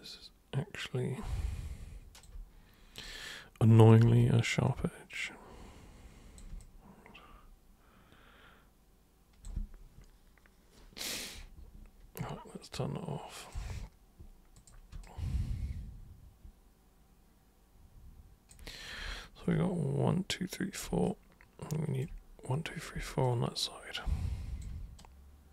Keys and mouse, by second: 0.5-2.2 alt+super+drag, 2.9 super+click, 3.7 super+click, 4.0 super+w, 4.6-6.3 super+drag, 6.6-8.7 alt+super+drag, 13.4 super+click, 14.6 super+click, 15.0-18.5 alt+super+drag, 21.0-22.0 alt+super+drag, 23.2-24.6 alt+super+drag, 24.9 super+right click.